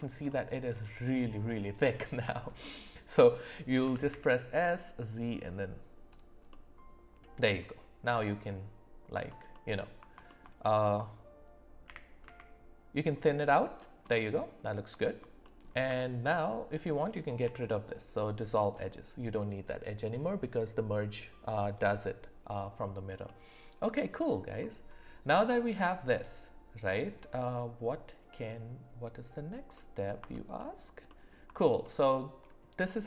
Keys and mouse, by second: 0.3 middle click, 2.3 alt+middle click, 3.8 s, 6.5 middle click, 10.3 shift+middle click, 11.9 g, 14.1 middle click, 15.0 shift+middle click, 15.4 middle click, 15.9 Tab, 17.4 x, 23.2 middle click, 29.7 middle click, 31.1 alt+middle click.